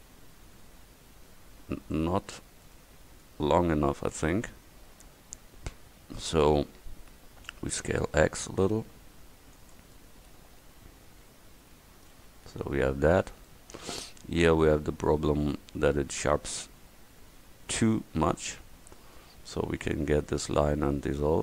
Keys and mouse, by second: 4.7 middle click, 5.2 middle click, 7.5 s, 12.2 Tab, 20.5 x.